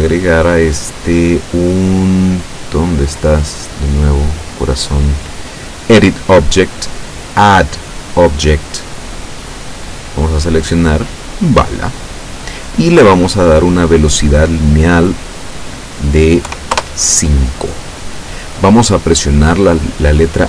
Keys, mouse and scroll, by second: 0.9 click, 5.9 click, 9.3 click, 11.4 click, 15.4 click, 16.5 KP_5, 16.8 KP_Enter.